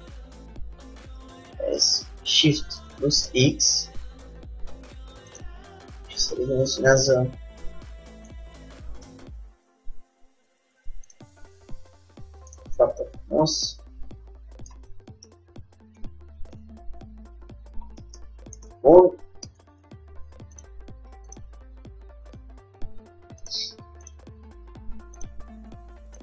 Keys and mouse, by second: 1.5 s, 6.1 g, 9.2 KP_3, 10.0 g, 11.9-13.6 drag, 13.6 middle click, 16.1 middle click, 16.7 KP_3, 17.0-18.3 middle drag, 20.1 Tab, 20.1 middle click, 20.7-23.2 drag, 22.5 g, 24.2-26.1 drag, 24.3 g.